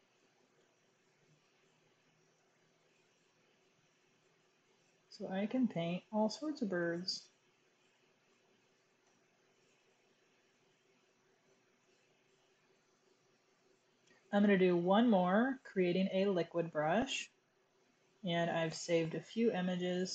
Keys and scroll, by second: 0.2 super+z, 0.5-1.0 typing, 2.2 ], 2.4 ], 2.5 ], 8.9 super+-, 11.3 super+=.